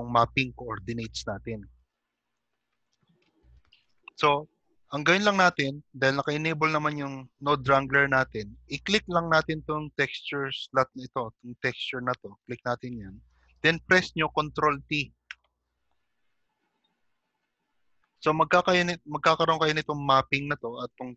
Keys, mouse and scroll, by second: 0.6 click, 0.6 shift+middle click, 0.6 scroll down 1, 5.4 click, 9.6 click, 10.9 scroll up 4, 12.8 click, 12.8-13.3 scroll up 4, 13.3 shift+middle click, 15.5 ctrl+t, 18.1 scroll down 2, 19.3 middle click, 19.3-20.4 scroll down 2.